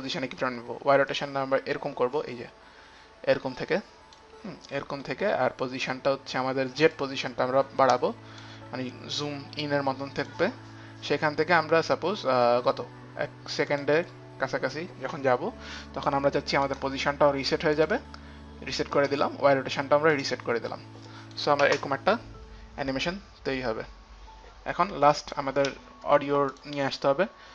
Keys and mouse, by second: 0.1 click, 1.3 click, 2.5 click, 4.3 click, 7.1 click, 9.3 click, 13.9 click, 14.9 click, 16.9 click, 16.9 right click, 18.2 right click, 18.2 click, 19.1 right click, 19.1 click, 20.3 right click, 20.3 click, 21.3 click, 21.3 right click, 21.9 space, 25.4 click, 25.4 space, 26.7 click.